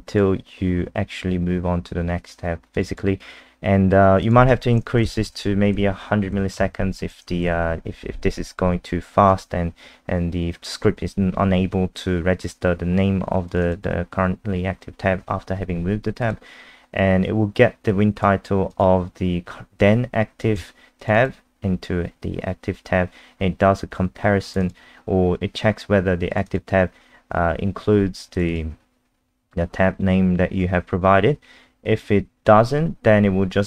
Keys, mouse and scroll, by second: 0.0 click, 2.9 click, 2.9 click, 4.2 click, 4.9-6.3 typing, 6.6 ctrl+z, 7.0 ctrl+z, 7.4 ctrl+s, 13.5 click, 13.6 click, 16.2 click, 21.1 click, 24.5 click, 24.6 click, 26.3 click, 26.5 click, 28.3 click, 28.5 click, 29.7-30.7 scroll up 1, 31.3-32.3 scroll down 1.